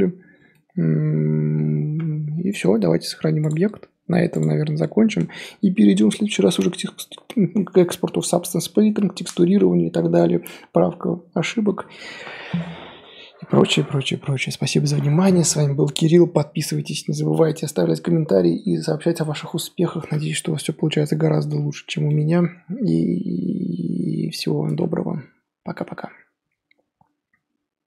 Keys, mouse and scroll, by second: 21.4 Tab, 22.1-24.6 middle drag, 24.6 Tab, 25.7-27.8 middle drag.